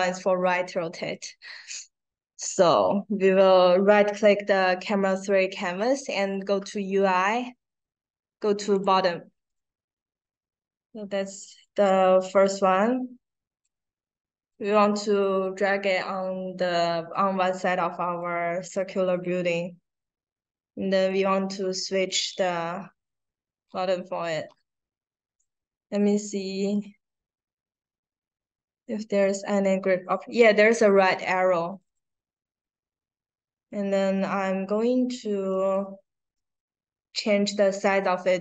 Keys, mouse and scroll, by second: 1.0 right click, 8.7 click, 9.4-10.0 drag, 11.6-13.5 drag, 14.4-15.1 drag, 18.1 click, 21.0 click, 22.0 click, 23.1 middle click, 24.0 middle click, 25.3 middle click, 27.5 middle click, 27.7-29.5 scroll down 2, 31.0 click, 31.6 click, 35.5 click.